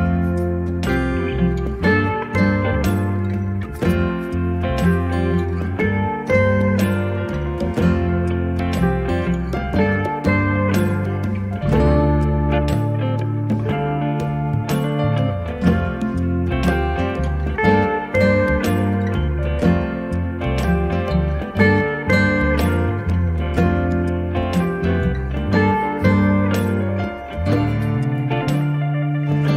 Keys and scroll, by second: 7.9 0, 8.2 KP_Decimal, 8.4 5, 9.9 0, 10.1 KP_Decimal, 10.3 5.